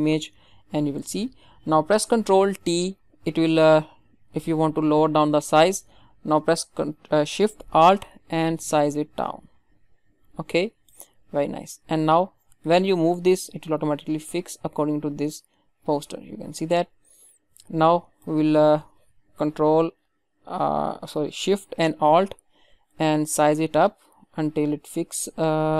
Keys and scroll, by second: 2.5 ctrl+t.